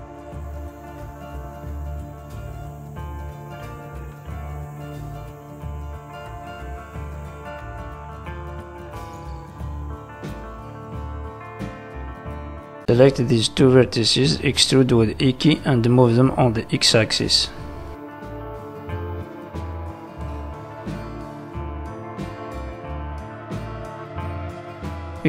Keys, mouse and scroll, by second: 1.4 click, 2.0 g, 2.9 click, 3.1 g, 4.2 click, 4.6 click, 5.3 click, 5.6 g, 7.0 click, 7.6 g, 8.6 scroll down 3, 8.9 middle click, 10.0 shift+middle click, 11.0 z, 12.2 middle click, 13.0 shift+middle click, 13.6 shift+click, 14.9 e, 15.8 click, 17.6 scroll down 3, 17.8 middle click, 20.3 middle click, 21.5-22.3 scroll up 2, 22.3 middle click.